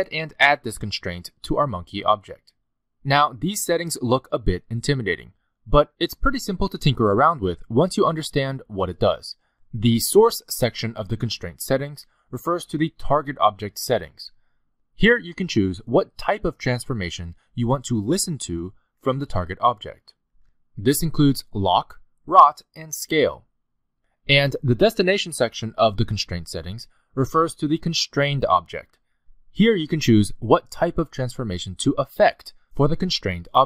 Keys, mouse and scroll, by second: 0.3 shift+a, 1.3 r, 2.0 click, 2.4 click, 5.1 click, 7.5-8.9 scroll down 4, 8.9-10.1 scroll up 3, 16.6 click, 17.2 click, 17.8 click, 18.5 click, 22.0 click, 22.9 click, 24.1 click, 25.8-26.3 scroll down 3, 27.2 scroll down 1, 31.6 click, 32.2 click, 33.0 click.